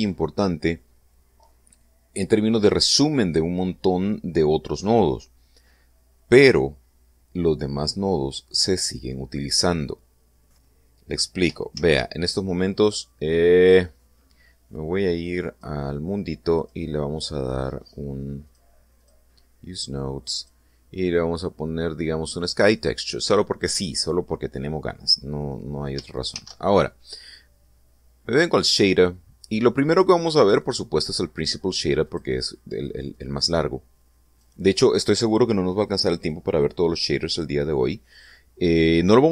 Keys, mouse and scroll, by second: 12.3 shift+z, 16.0 click, 17.1 click, 18.9 click, 19.5 click, 20.9 click, 23.0 click, 26.8 shift+a, 31.5 click, 32.6 click, 33.7-35.1 drag, 39.0-39.3 scroll down 4.